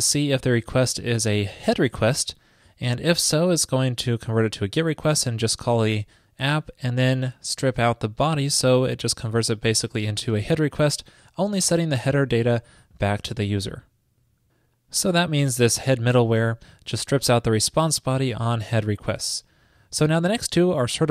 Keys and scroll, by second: 16.5 super+v.